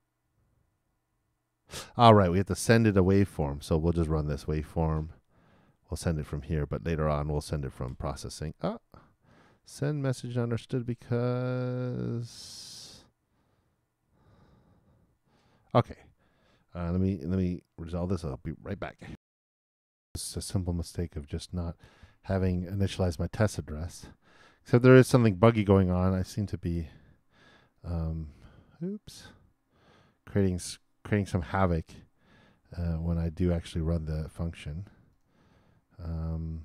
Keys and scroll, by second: 7.9 super+Return, 19.1 alt+i, 25.9 super+Return, 32.7 super+Return.